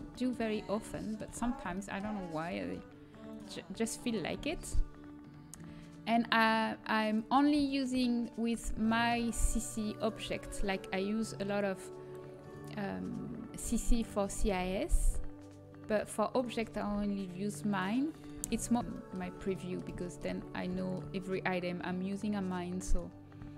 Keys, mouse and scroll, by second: 4.3 g, 9.9-12.5 drag, 10.2 g, 14.0-15.8 drag, 14.4 g, 16.7 g, 18.3 g, 18.9-20.9 middle drag, 22.5-23.5 drag.